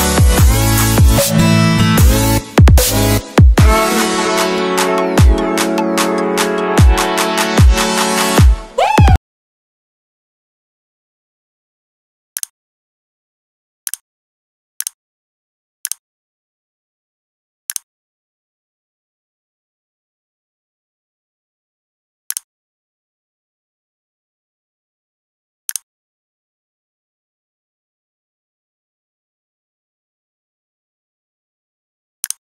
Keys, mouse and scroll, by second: 2.7 ctrl+c, 3.3 c, 3.6 click, 4.9 ctrl+v, 5.7 click, 6.2 click, 6.4 click, 7.2 right click, 8.1 click.